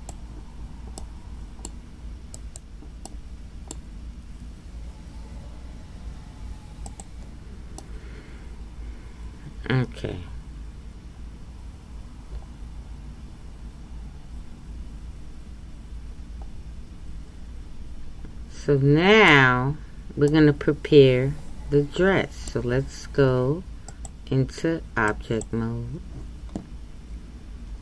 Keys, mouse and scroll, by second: 1.0-2.3 middle drag, 2.3 right click, 3.1-4.2 middle drag, 4.2 g, 7.8-11.0 middle drag, 20.3-25.4 middle drag, 25.4-27.8 drag.